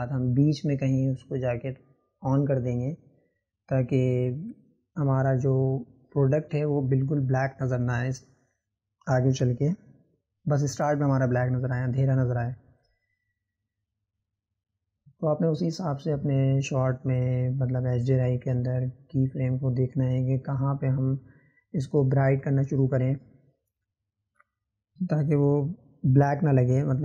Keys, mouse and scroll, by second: 16.3-19.6 drag, 19.6-21.4 right drag, 21.4 click, 22.7-27.0 drag.